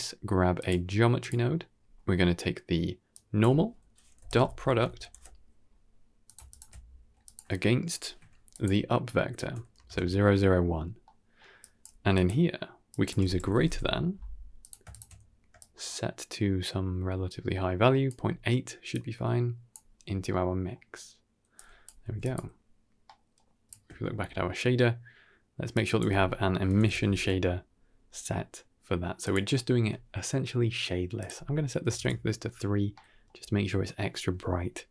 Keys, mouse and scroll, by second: 1.7-3.0 scroll up 2, 3.0-6.2 drag, 6.4 ctrl+shift+click, 7.1 click, 7.8 ctrl+h, 8.4-9.7 drag, 10.7 scroll down 1, 10.9 middle click, 11.5 click, 11.8 g, 12.8-14.6 drag, 15.5-17.9 shift+drag, 18.8-19.6 drag, 19.9 scroll down 2, 20.2-20.6 middle drag, 21.4 click, 21.9 g, 22.9 middle click, 23.5 ctrl+shift+click, 25.6-29.2 drag, 26.9 s, 31.1 click, 32.8 middle click.